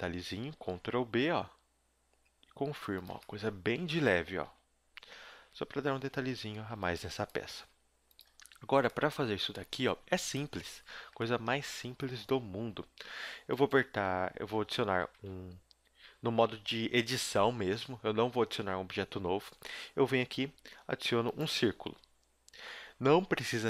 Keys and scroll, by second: 0.6 ctrl+b, 4.4 Tab, 5.4-7.4 typing, 6.0 Tab, 10.1 a, 10.6 z, 14.4 a, 15.2 shift+a, 17.7 shift+a.